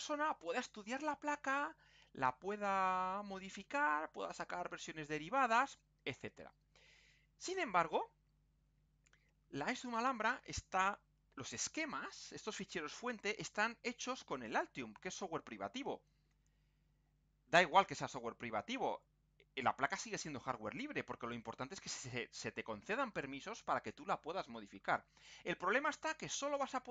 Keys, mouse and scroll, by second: 1.4 scroll down 2, 2.0-2.6 scroll up 2.